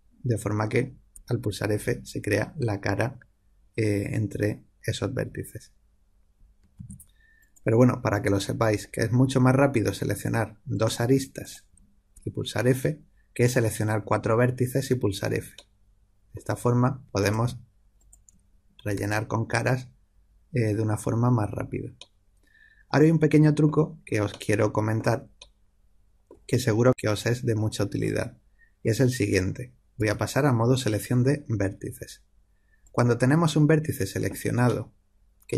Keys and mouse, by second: 1.1 f, 6.7 ctrl+z, 7.4 click, 10.7 click, 12.1 f, 15.5-17.1 middle drag, 17.1-19.7 drag, 18.9 f, 22.3-29.9 middle drag, 29.9 1, 32.8 click, 34.6-35.5 middle drag.